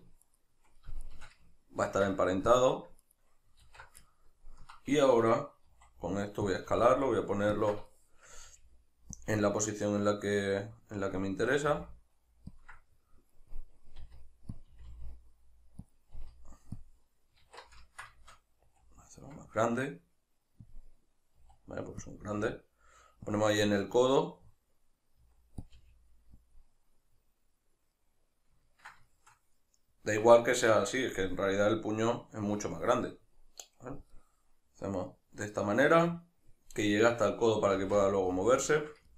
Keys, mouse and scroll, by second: 0.3 shift+right click, 1.1 shift+right click, 1.9 ctrl+p, 3.0 right click, 3.7 alt+q, 4.1-6.6 ctrl+middle drag, 5.7 s, 6.6 click, 6.7 g, 7.6 shift+click, 7.9-9.2 shift+middle drag, 8.4 g, 9.2 click, 10.5-12.6 middle drag, 11.7 g, 12.6 ctrl+click, 12.8-14.6 middle drag, 14.0 r, 14.6 click, 14.7 r, 15.9 click, 16.2 r, 16.9 click, 17.5 alt+q, 17.9-20.7 ctrl+shift+middle drag, 18.7 s, 20.7 click, 21.4 middle click, 21.4 s, 22.1 click, 22.3 g, 23.4 click, 23.5-25.7 middle drag, 25.2 s, 25.7 click, 25.8 g, 26.5 click, 26.7-39.1 middle drag, 37.8 alt+q.